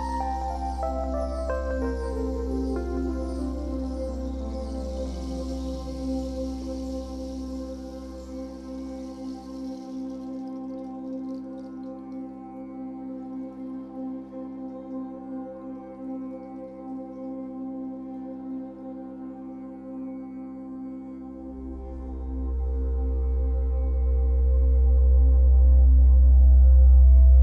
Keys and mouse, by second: 2.6 click, 3.3 click, 7.6 click, 11.2 z, 12.6 click, 15.6 ctrl+z, 18.4 z, 20.4 z, 20.9 click, 23.7 a, 24.1 Delete, 24.8 d, 24.9 Delete, 24.9 ctrl+a, 26.8 z.